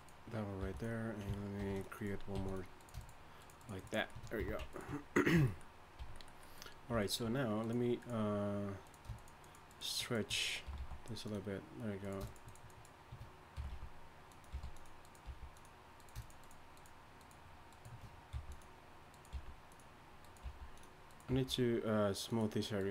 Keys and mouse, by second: 0.6 g, 1.6 ctrl+r, 2.3 g, 2.8 right click, 4.4 f, 5.3 f, 6.0 a, 9.4 a, 10.6 g, 13.5 g, 14.5 g, 15.2 g, 18.3 g, 19.3 g, 20.4 g, 21.3 g.